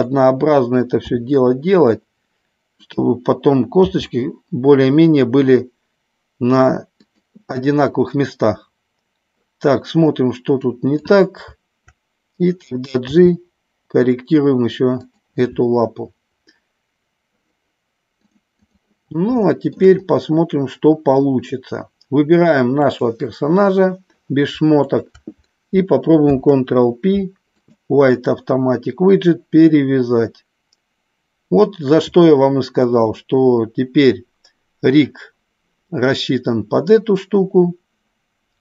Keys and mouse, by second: 1.0 s, 3.7 g, 7.0 click, 10.6 click, 13.1 g, 15.1 click, 18.4 click, 19.5 shift+middle click, 22.9 click, 24.8 shift+click, 26.2 ctrl+p.